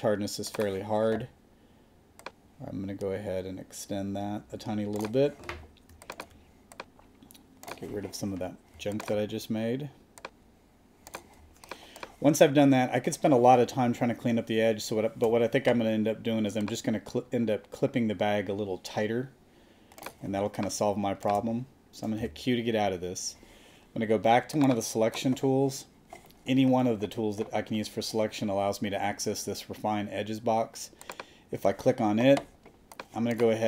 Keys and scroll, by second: 1.1 [, 11.4 space, 20.3 space, 22.2 q.